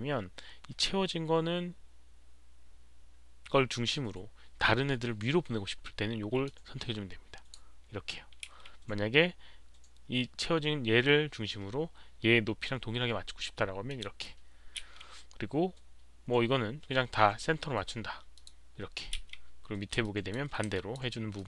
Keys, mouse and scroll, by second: 6.4-7.5 drag, 8.4 z, 13.8 click, 13.8 z, 14.8 z, 17.2 click, 17.2 z, 18.3 click, 19.1 click, 19.1 z, 20.0 alt+click, 20.7 alt+click, 21.3 alt+click.